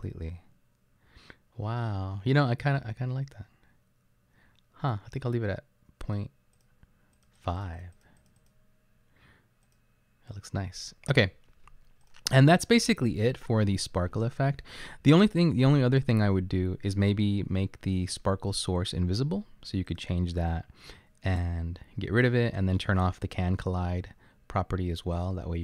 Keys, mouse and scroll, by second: 9.7 click.